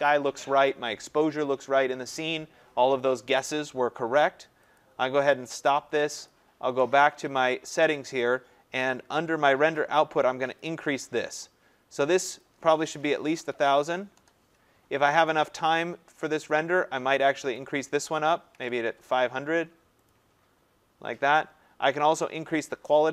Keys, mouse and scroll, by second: 4.8 click, 6.3 click, 10.6 click, 12.4 click, 12.8-14.2 typing, 15.3 click, 17.7 click, 18.1-19.1 typing, 20.1 click.